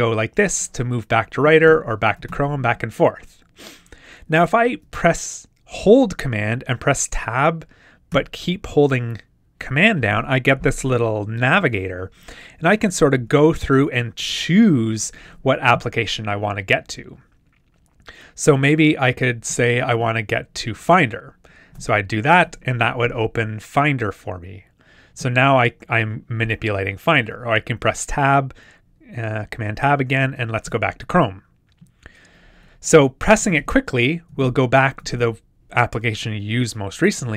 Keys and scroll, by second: 1.7 super+Tab, 8.1 super+Tab, 12.9 super+Tab, 19.0 super+Tab, 27.7 super+Tab, 30.2 super+Tab, 33.5 super+Tab.